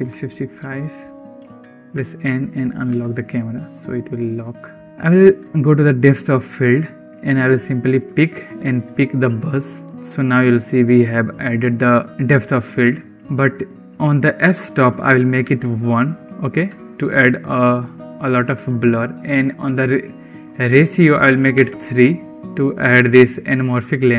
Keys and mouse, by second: 1.4 click, 1.7 n, 2.4 click, 2.7 n, 3.2-3.9 shift+drag, 3.9 shift+middle click, 4.8 ctrl+s, 6.3 click, 7.8 click, 14.6-15.8 drag, 20.5-21.9 drag.